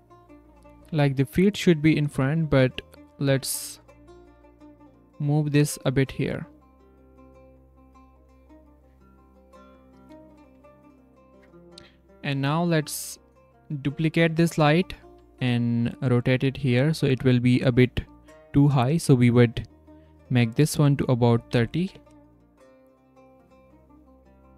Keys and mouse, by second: 0.0-0.8 drag, 0.8 r, 3.3 g, 4.2 r, 7.4 click, 7.9 z, 12.9 z, 15.1 shift+r, 16.3 z, 18.2-21.9 drag.